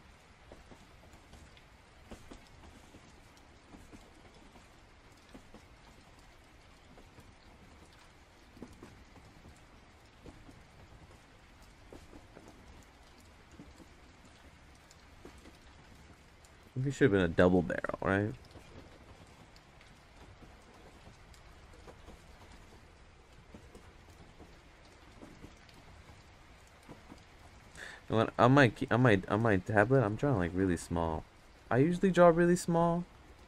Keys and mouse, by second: 0.0-1.3 drag, 6.5-9.6 drag, 16.7 click, 17.6 ctrl+z, 19.2-20.5 drag, 23.3 click, 24.9-25.9 drag, 26.1 ctrl+z, 26.4-27.5 drag, 28.0 ctrl+z, 28.5 click, 29.4 ctrl+z, 29.6-30.9 drag.